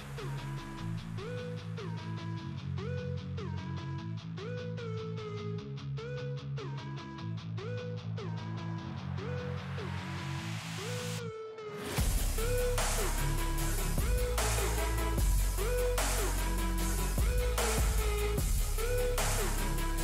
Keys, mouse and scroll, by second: 1.2 click, 2.1 F4, 3.0-9.8 drag, 9.8 space, 10.4-14.4 drag, 14.4-20.0 drag.